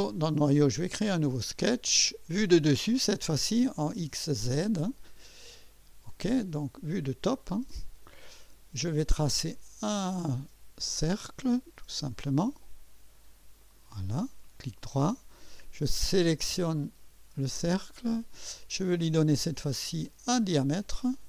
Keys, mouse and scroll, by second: 1.7 click, 4.5 click, 6.1 click, 7.6-8.0 scroll up 1, 8.1-8.6 right drag, 10.9 click, 12.4 click, 13.6 click, 14.6 right click, 16.8 click, 20.0 click.